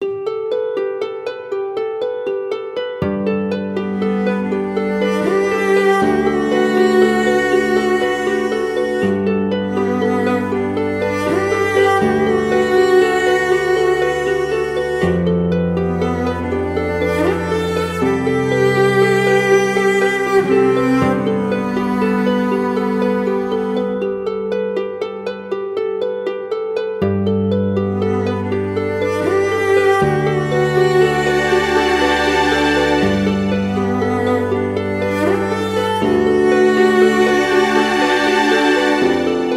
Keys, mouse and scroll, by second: 0.9 Return, 13.4 ctrl+t, 18.5 Return, 26.3 double click.